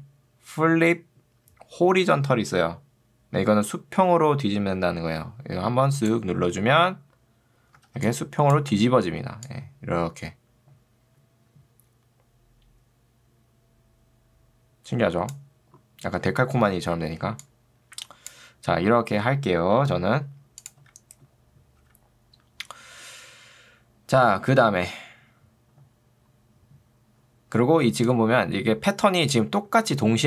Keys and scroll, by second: 7.9 ctrl+2, 8.7 Escape, 21.9 r, 29.9 ctrl+2.